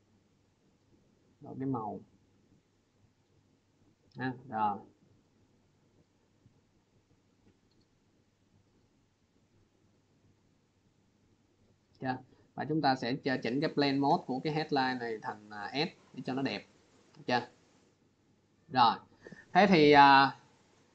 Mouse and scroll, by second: 2.6 click, 3.4 click, 7.1 click, 11.0 click, 12.3 click, 14.1 click, 15.6 click, 17.0 click, 18.5 click.